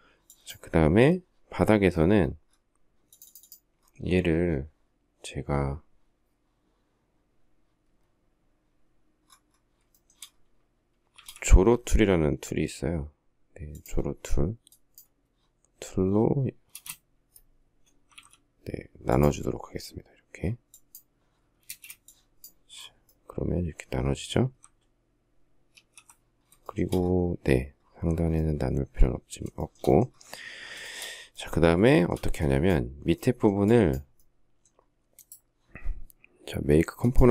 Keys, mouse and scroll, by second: 9.7 shift+middle click, 10.9 shift+x, 16.5 space, 17.9 alt+x, 21.4 space, 25.5 alt+f, 26.4 shift+middle click, 29.4 shift+middle click, 30.6 shift+middle click.